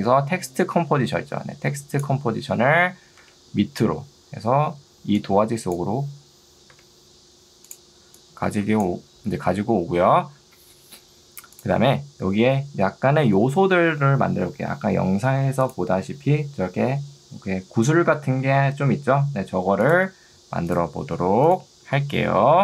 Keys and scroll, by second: 5.0 ctrl+2, 6.8 Escape.